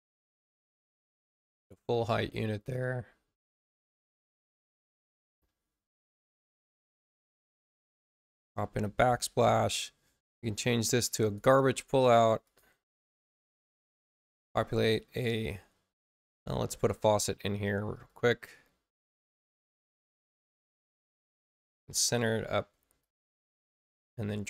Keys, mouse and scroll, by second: 1.2 click, 1.9 click, 2.7-4.5 drag, 7.7 click, 11.2 click, 12.4 click, 14.3 click, 16.6 click, 17.9 click, 20.3 space, 20.9 click, 22.2-22.9 typing, 22.9 click, 24.2 click.